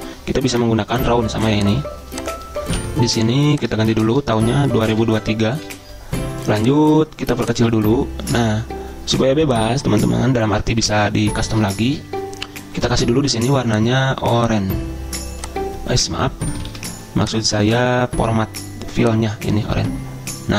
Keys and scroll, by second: 3.9 ctrl+a, 4.6-6.2 typing, 16.8 ctrl+z.